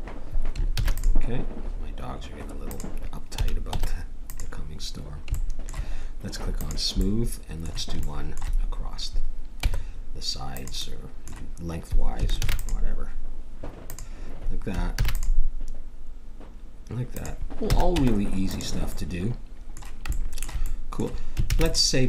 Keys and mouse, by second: 0.7 ctrl+r, 3.3 a, 3.7 Tab, 6.6-9.6 drag, 9.6 Tab, 12.4 ctrl+r, 14.9 ctrl+r, 17.7 a, 17.9 Tab, 18.9 middle click, 21.5 ctrl+s.